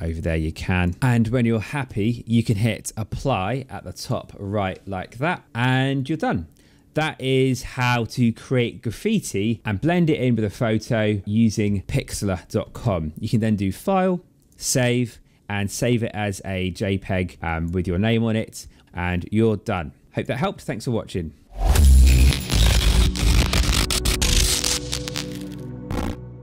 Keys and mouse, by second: 3.9 click, 5.9 click, 7.2 click, 13.2 click, 14.4 click, 15.7 click, 17.4 click, 20.1 click.